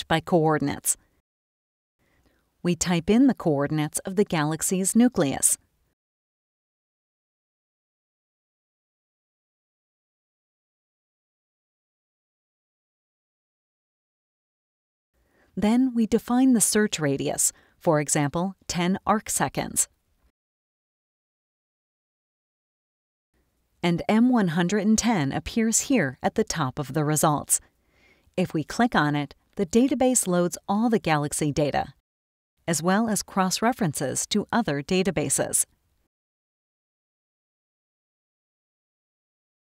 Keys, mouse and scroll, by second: 0.7 click, 3.1 click, 5.5-8.9 drag, 10.4 click, 12.4-14.7 typing, 16.8 click, 18.7 KP_1, 18.9 KP_0, 19.8 click, 21.5 click, 23.7 click, 28.7 click, 32.8-33.7 scroll down 4, 33.9-34.2 scroll down 2, 38.4 click.